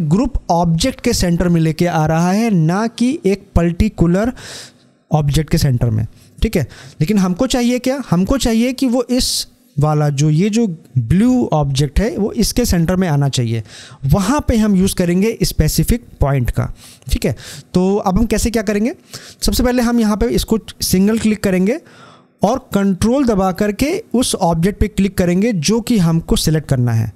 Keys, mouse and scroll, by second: 7.2-10.1 drag, 19.2 click.